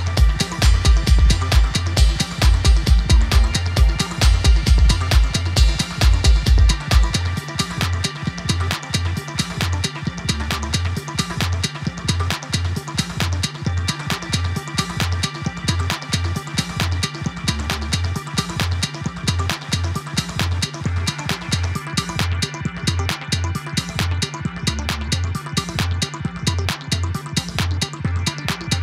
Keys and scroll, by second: 1.9 typing, 4.5 typing, 7.9 typing, 17.5 typing, 24.7 typing, 27.0 typing.